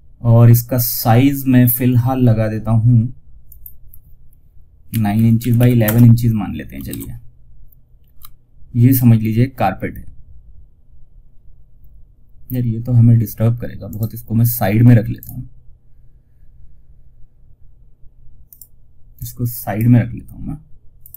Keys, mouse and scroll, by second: 2.8 click, 4.5 Tab, 6.2 shift+F2, 13.2 click, 14.4 right click, 18.4 click, 20.3 click, 21.0 space.